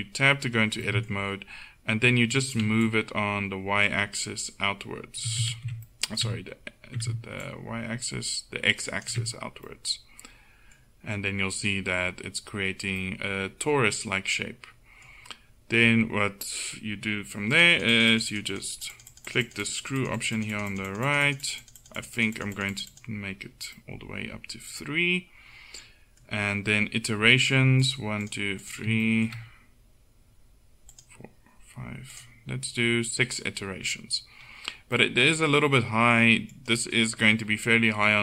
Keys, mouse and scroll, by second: 2.9-5.2 drag, 5.6 ctrl+z, 7.5-9.1 drag, 17.6-20.3 drag, 23.6-24.8 drag, 23.8-25.6 middle drag, 27.9-34.0 drag, 36.6-38.2 drag.